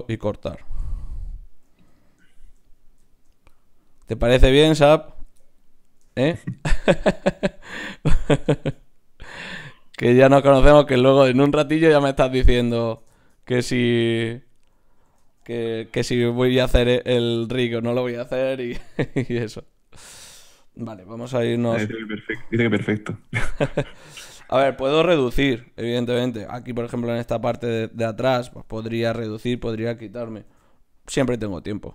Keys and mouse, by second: 3.8-6.6 right drag, 7.2 ctrl+Tab, 8.5-9.8 drag, 10.5 click, 12.3 click, 15.9 e, 18.8 s, 21.3 KP_7, 23.0 g, 25.0 s, 30.5 ctrl+r.